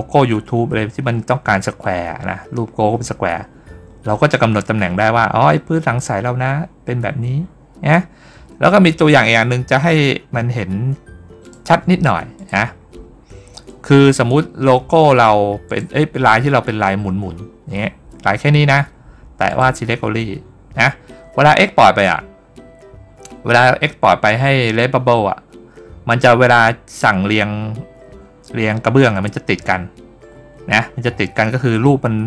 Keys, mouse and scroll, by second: 11.3 click, 12.2 click, 12.7 middle click, 12.7 scroll down 1, 13.5 middle click, 15.5 click, 19.3 click.